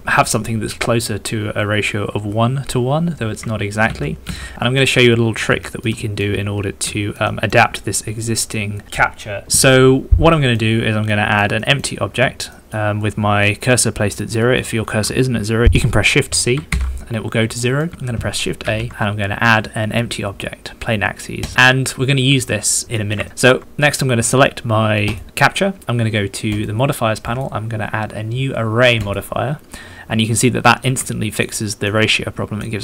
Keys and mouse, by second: 3.9 ctrl+z, 4.2 ctrl+z, 4.5 ctrl+z, 4.8 middle click, 5.6 shift+click, 5.9 middle click, 6.9 shift+middle click, 7.2 middle click, 8.2 middle click, 10.3 middle click, 11.1 middle click, 11.6 shift+click, 12.5 shift+click, 14.4 shift+click, 15.6 shift+s, 16.7 shift+c, 17.6 middle click, 18.6 shift+a, 22.5 shift+middle click, 23.0 shift+middle click, 23.2 ctrl+shift+middle drag, 27.2-29.7 drag, 30.2-30.8 shift+middle drag, 30.8 shift+click, 31.0-31.4 ctrl+middle drag, 31.5-31.8 ctrl+middle drag, 32.1-32.6 middle drag.